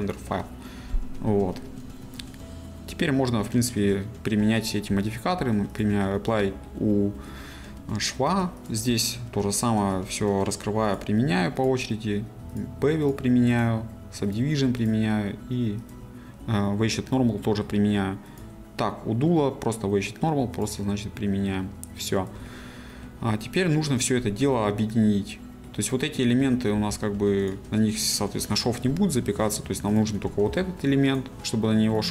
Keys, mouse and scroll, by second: 0.0-6.3 drag, 6.3-8.7 middle drag, 8.7 click, 16.6-18.4 middle drag, 18.4 click, 21.6-24.1 middle drag, 24.1 click, 24.4-26.8 middle drag, 26.8 g, 27.5 right click, 28.6-30.0 middle drag, 30.0 click, 30.5 g, 31.2 right click.